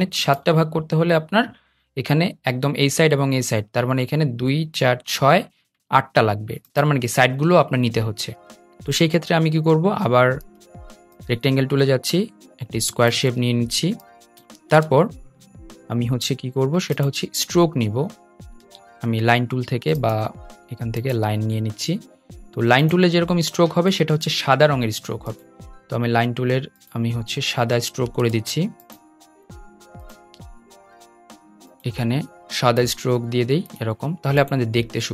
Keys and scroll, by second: 18.3 super+z, 23.8 ⟲, 28.0 super+z.